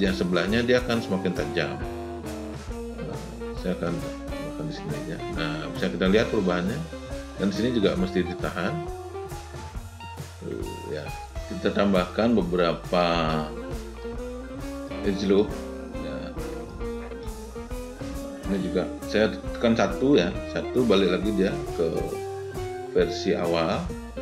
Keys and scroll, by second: 20.1 1.